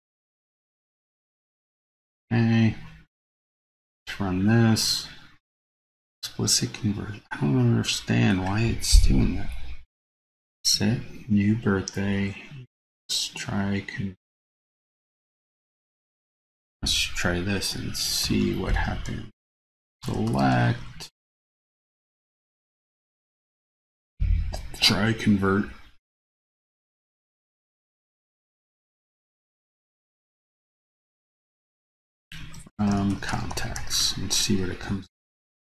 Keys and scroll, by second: 29.0 super+c, 30.1 super+v.